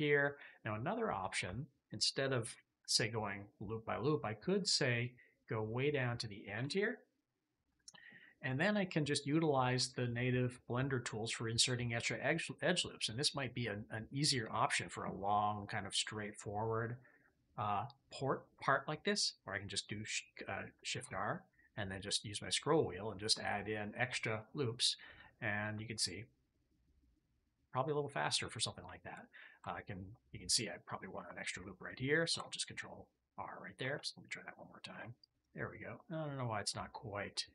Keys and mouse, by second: 20.8 ctrl+r, 24.1 click, 25.0 click, 25.7 shift+click, 26.2-28.3 middle drag, 28.8 shift+middle click, 32.2 ctrl+r, 32.5-33.5 drag, 33.7 ctrl+z, 34.8 ctrl+r, 35.1-36.7 drag, 37.2-37.5 drag.